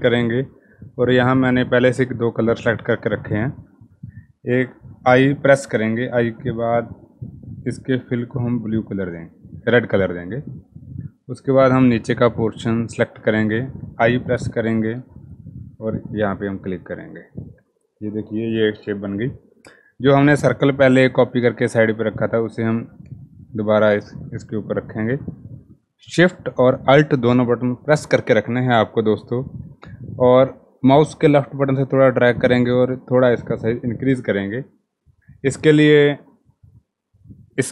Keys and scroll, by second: 5.1 i, 13.7 i.